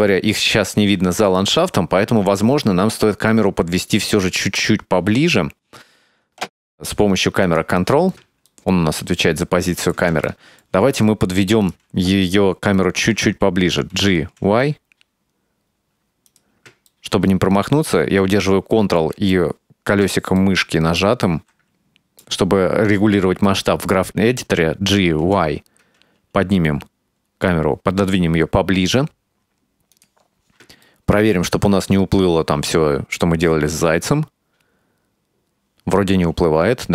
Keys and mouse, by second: 4.2 click, 7.6 click, 8.6-10.0 ctrl+middle drag, 10.4 shift+middle click, 11.0-11.8 right drag, 14.0 g, 16.9-19.1 ctrl+middle drag, 19.4 middle click, 20.4 ctrl+middle click, 21.3-22.4 middle drag, 24.3 g, 30.9 ctrl+middle click, 32.0-36.9 drag.